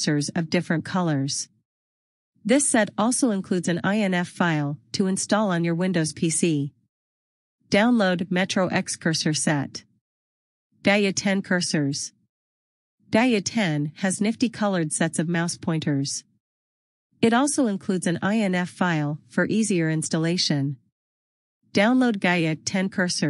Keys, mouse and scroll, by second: 0.4 scroll up 1, 12.6 click, 16.9 click, 17.7 scroll down 1, 19.0 click.